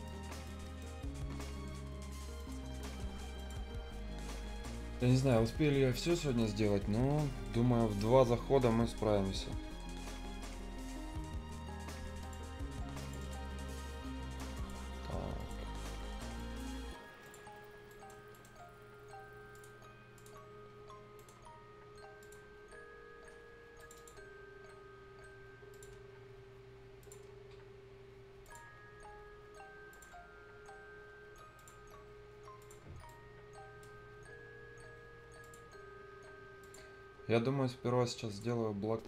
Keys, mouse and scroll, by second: 3.6-4.0 scroll up 1, 4.2-4.5 scroll up 1, 5.2 click, 5.6 scroll up 1, 6.9 Escape, 7.9 right click, 12.9 click, 17.7-18.2 scroll down 2, 17.9 right click, 18.3 right click, 19.5 click, 20.5 scroll down 1, 21.1 right click, 21.3 scroll down 1, 21.6 scroll up 1, 22.2 click, 22.4 scroll up 1, 23.7 click, 24.4 scroll down 1, 24.6 scroll, 24.7 scroll up 1, 25.7 click, 25.9 scroll down 1, 26.1 scroll up 1, 27.0 click, 27.2 scroll down 1, 27.6 scroll up 1, 28.4 click, 28.7 scroll down 1, 29.0-29.4 scroll up 1, 29.9 click, 30.1 scroll down 1, 30.4 scroll up 1, 31.5 click, 31.8 scroll down 1, 32.0-32.6 scroll up 1, 32.6 click, 32.8 scroll down 1, 33.0 right click, 33.8 scroll down 1, 34.0-34.9 scroll up 1, 35.4 click, 35.7-36.0 scroll up 1, 36.8 scroll down 1, 37.3-38.3 scroll up 1, 38.3 click, 38.5-38.8 scroll down 1, 38.8-39.0 scroll up 1.